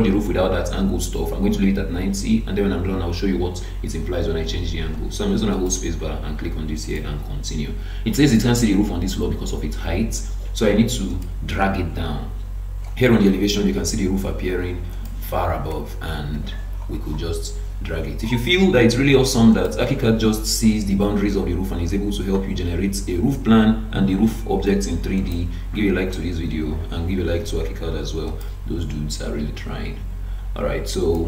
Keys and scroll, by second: 16.3 ctrl+d.